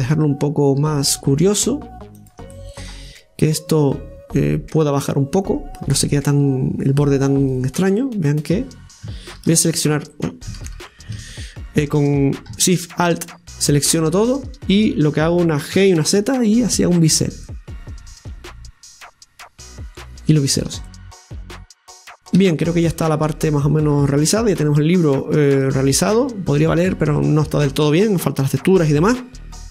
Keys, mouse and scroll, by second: 2.5-3.5 middle drag, 3.5-4.8 right drag, 4.9 click, 5.8-7.2 right drag, 7.2-9.4 drag, 13.7-15.7 alt+shift+right drag, 15.7 g, 17.5-20.4 middle drag, 20.4-20.9 scroll down 1, 20.9 middle click, 21.5 right click, 22.4 Tab, 22.7 scroll down 2, 22.9-26.0 middle drag, 26.7-27.2 scroll up 2, 27.2-29.3 shift+middle drag, 29.3-29.7 scroll up 3.